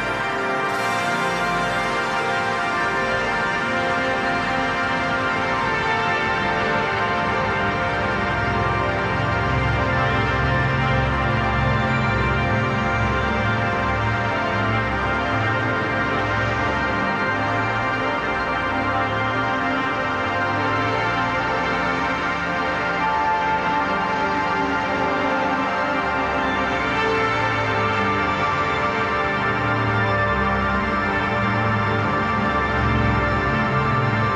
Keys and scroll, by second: 7.3 ctrl+z, 9.9 ctrl+z, 15.1 ctrl+j, 15.3 ctrl+t, 33.4 ctrl+z.